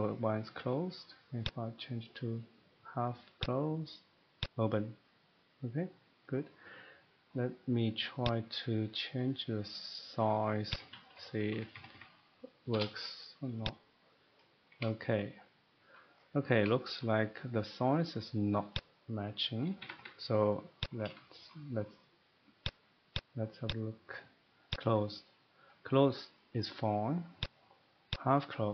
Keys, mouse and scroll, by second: 1.4 click, 3.1 click, 3.4 click, 4.4 click, 6.5 middle click, 7.6 middle click, 8.3 click, 9.2 middle click, 9.6-10.5 scroll, 10.7 click, 10.9-11.5 typing, 12.7 BackSpace, 13.7 click, 14.2 BackSpace, 14.7 middle click, 16.0 shift+middle click, 16.2 scroll, 16.9 shift+middle click, 18.7 shift+middle click, 18.7 click, 19.8 Escape, 19.9 Escape, 20.8 click, 21.5 shift+middle click, 22.6 click, 23.1 click, 23.7 click, 24.7 click, 27.4 click, 28.1 click.